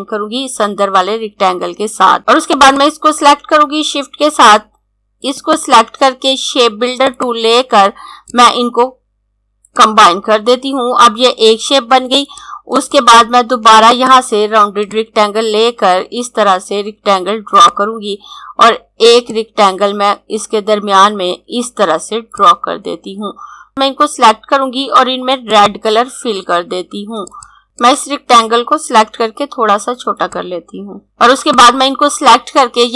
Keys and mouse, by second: 2.6 click, 5.3 click, 7.0 click, 30.2 shift+Num_Lock, 30.2 shift+click, 31.0 click.